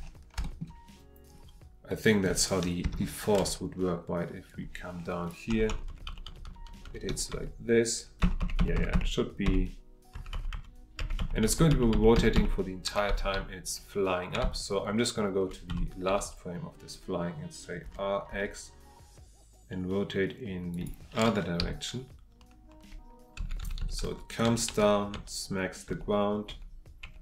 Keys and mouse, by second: 0.4 shift+middle click, 1.9-2.2 middle drag, 2.8 KP_3, 4.5-5.3 drag, 18.3 x, 20.7 click.